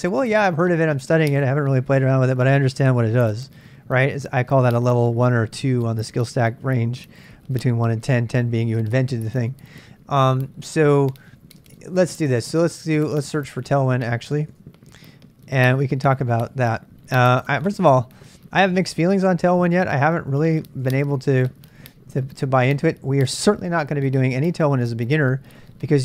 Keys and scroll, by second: 10.9-14.5 typing, 14.5 super+Tab, 16.2 super+Tab, 19.5-21.8 typing, 20.8 Return.